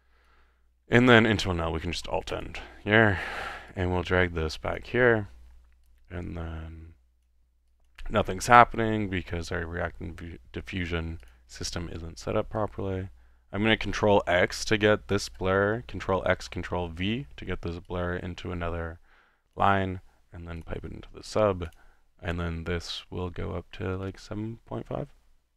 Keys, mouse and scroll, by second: 1.1 click, 1.9 alt+n, 2.5-3.7 alt+drag, 4.7-5.3 drag, 7.2-8.0 drag, 8.4 drag, 8.9-9.7 middle drag, 10.0-10.5 middle drag, 11.2 click, 11.5 click, 11.8 ctrl+x, 14.3 ctrl+v, 14.7-15.4 ctrl+drag, 15.7 ctrl+middle click, 16.4 x, 16.9 ctrl+v, 17.4 ctrl+v, 17.9-19.2 ctrl+drag, 19.6-20.4 drag, 20.8-21.2 drag, 21.8 drag, 22.3-25.1 middle drag.